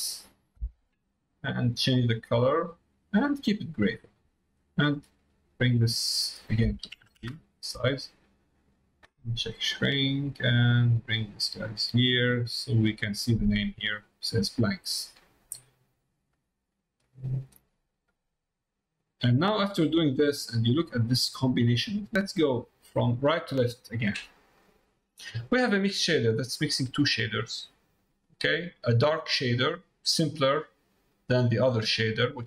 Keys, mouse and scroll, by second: 3.2 middle click, 5.1-8.0 drag, 8.8 click, 10.3 middle click, 11.1 click, 12.0 click, 13.3 click, 15.1 middle click, 16.1 middle click, 17.0 click, 19.1-20.2 drag, 20.6 middle click, 22.0 middle click, 22.6 middle click, 24.5 middle click, 25.9 middle click, 26.9 middle click, 29.3 middle click.